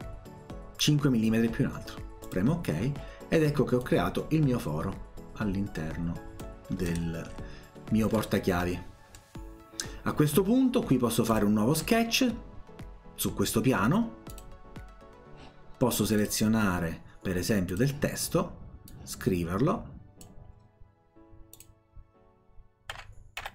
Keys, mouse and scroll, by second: 2.3 click, 3.8-6.4 drag, 6.7-7.5 scroll up 2, 8.2 middle click, 9.1 scroll down 1, 11.3 click, 14.3 click, 16.2 click, 17.7 click, 18.9-20.3 drag, 21.6 click, 22.7-23.5 typing.